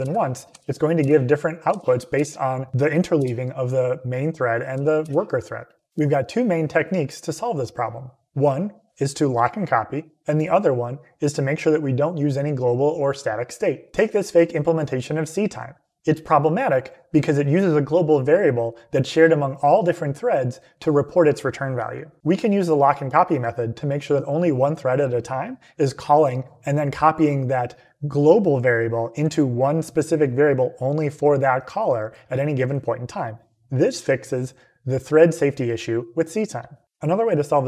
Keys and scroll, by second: 0.4 Up, 0.9 Return, 1.6 Up, 2.0 Return, 3.1 Return, 4.6 Up, 4.9 Return.